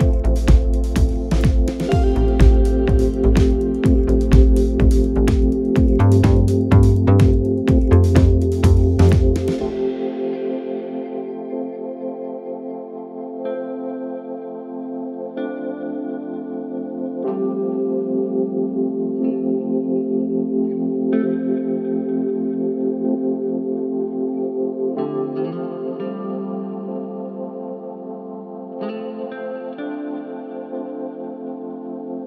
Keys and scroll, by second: 2.7 ctrl+z, 8.9 f, 10.4 d, 11.3 f, 18.0 f.